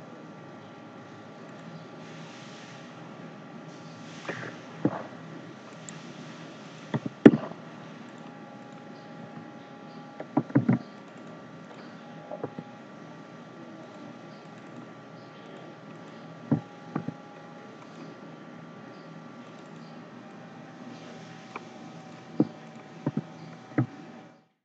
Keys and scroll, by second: 10.5 ctrl+z.